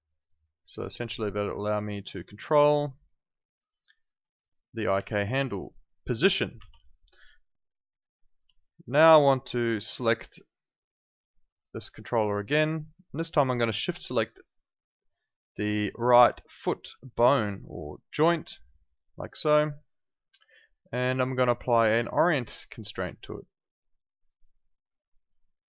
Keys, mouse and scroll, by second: 3.7 alt+click, 4.0 alt+right click, 4.2 alt+middle click, 4.4 alt+right click, 4.6 alt+click, 5.9 click, 6.5 ctrl+z, 6.8 alt+click, 7.3 alt+middle click, 7.6 alt+right click, 7.8 alt+click, 11.6 click, 16.4 shift+click, 24.0 click, 25.4 alt+click.